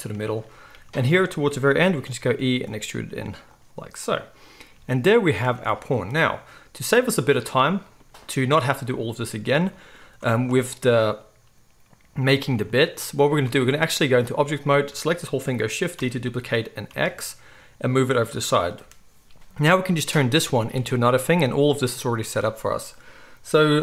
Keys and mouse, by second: 1.8 e, 4.0 click, 4.0-10.0 middle drag, 4.7 g, 5.5 Tab, 7.0 z, 10.2 Tab, 10.4 z, 13.5 Tab, 16.0 shift+d, 16.1 middle click, 19.5 click, 20.8 Tab.